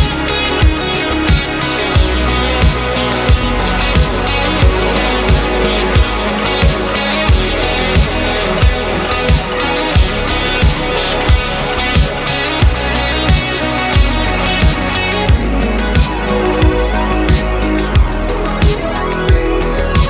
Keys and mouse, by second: 1.8-2.5 middle drag, 3.8 middle click, 8.4 middle click, 9.2 middle click, 12.0-14.0 drag, 14.3 middle click, 16.5 middle click, 18.2-18.6 middle drag, 19.0-19.3 middle drag.